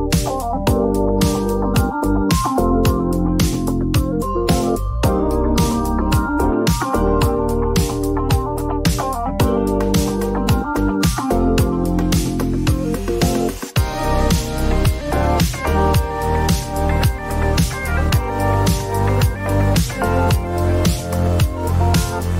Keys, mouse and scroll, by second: 1.9 click, 3.3 click, 7.0 click, 8.5 click, 9.6 click, 9.7 click, 11.5 click, 12.2 click, 13.6 click, 13.9-16.6 typing, 19.3 click, 21.6 click, 22.1 F9.